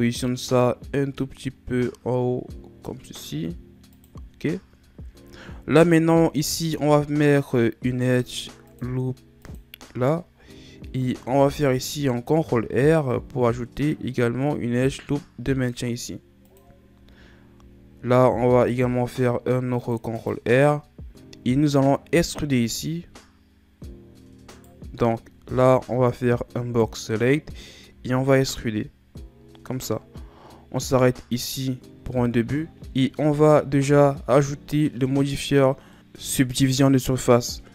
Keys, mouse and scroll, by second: 4.5 scroll up 1, 5.3-6.7 scroll up 2, 6.7 ctrl+r, 10.6-11.3 scroll up 2, 11.3 ctrl+r, 17.2-18.6 scroll up 6, 18.6 ctrl+r, 24.5 right click, 25.4 b, 32.7 ctrl+z, 33.3 Tab, 33.8 z, 34.9-35.9 scroll down 2, 35.9-37.1 middle drag.